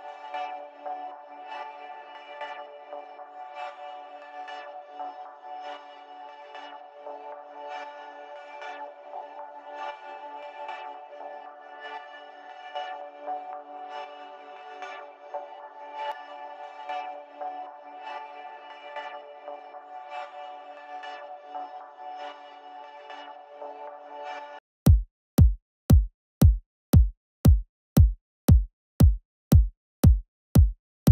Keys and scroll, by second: 24.5 typing.